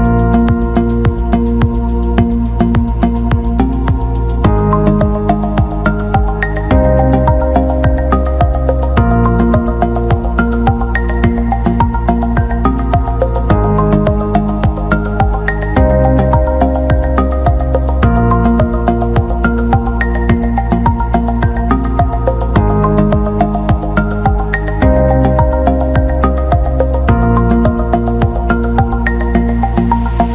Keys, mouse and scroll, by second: 4.9-6.6 right drag, 6.6 click, 7.7 click, 8.4 click, 9.0 ctrl+z, 10.9 click, 11.8-14.7 drag, 16.4 click, 16.8 click, 22.3-24.0 right drag, 24.9 alt+shift+middle click, 26.1 alt+shift+middle click, 29.0-30.3 drag.